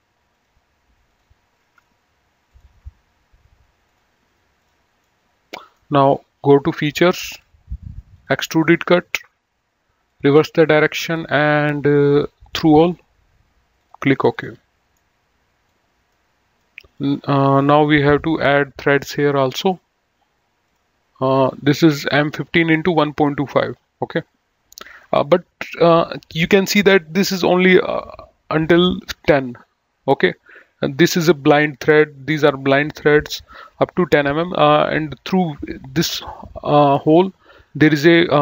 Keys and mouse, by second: 0.1 click, 2.2 ctrl+click, 4.9 middle click, 7.3 click, 10.0 click, 11.1 click, 12.4 click, 13.8 click, 14.9 middle click, 20.6 click.